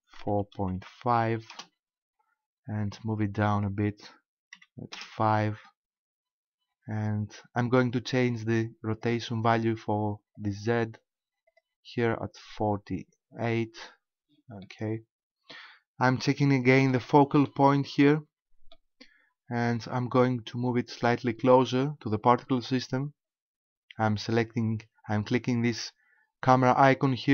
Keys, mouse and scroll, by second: 3.5 click, 8.9 click, 10.4 click, 11.5 click, 14.6 middle click, 16.4 shift+middle click, 17.1 middle click, 18.0 middle click.